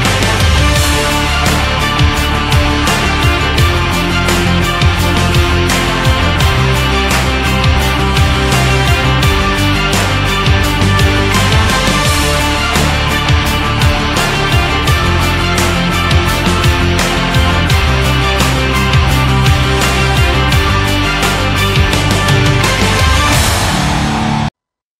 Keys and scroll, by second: 0.9 Left, 23.4 ctrl+x.